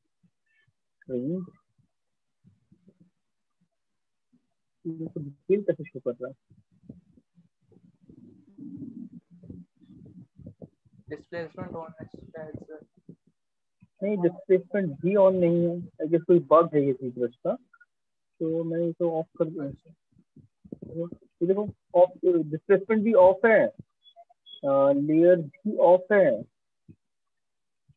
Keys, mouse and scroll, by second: 3.8 alt+click, 5.5 click, 6.4 right click, 7.4 click, 8.7 alt+click, 11.2 click, 12.4 click, 14.5 click, 15.2 click, 18.0 right click, 19.3 click, 22.2 shift+click, 23.2 click, 24.4 click.